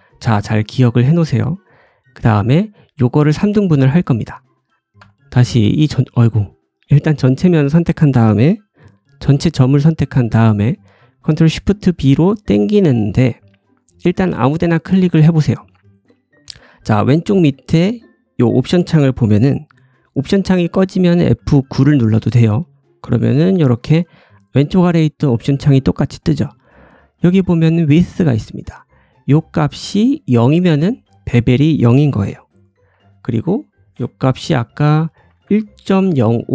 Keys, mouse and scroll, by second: 0.0-4.6 right drag, 4.6 click, 4.9 1, 4.9 a, 11.3 ctrl+shift+b, 16.7-22.5 drag, 21.2 F9, 23.2 F9, 32.8 F9.